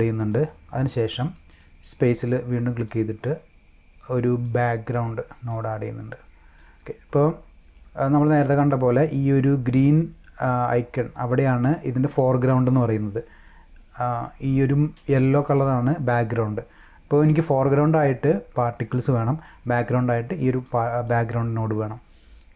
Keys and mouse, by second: 1.5 click, 2.8 click, 4.4 click, 5.5-6.5 drag, 20.6 click.